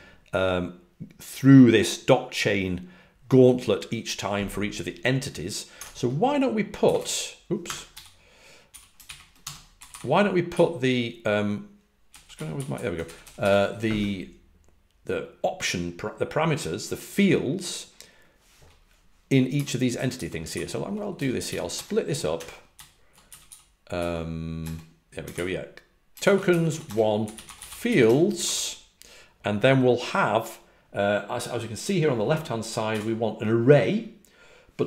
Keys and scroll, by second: 5.7 Escape, 6.8 g, 6.9 g, 7.6 Escape, 7.8 x, 8.6 a, 9.7-10.7 typing, 11.8-13.3 typing, 19.2-23.2 typing, 24.5 Return, 24.5-25.3 typing, 26.5-28.3 typing.